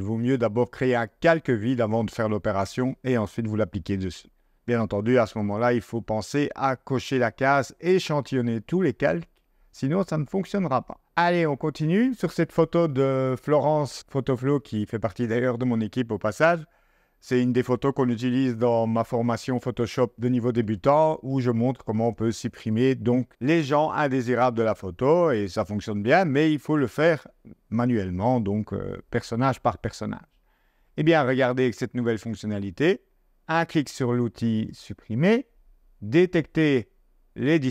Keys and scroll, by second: 33.3 0.